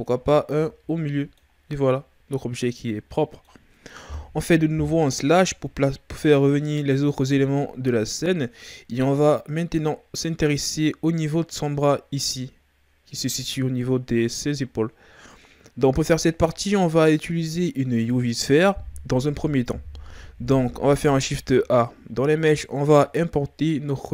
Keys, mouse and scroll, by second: 0.2 scroll down 4, 0.5-4.7 middle drag, 4.7 KP_Divide, 6.1 KP_1, 7.1 a, 7.6-8.1 scroll down 5, 8.1-9.2 shift+scroll up 4, 9.2-9.9 ctrl+scroll up 1, 21.2 shift+a.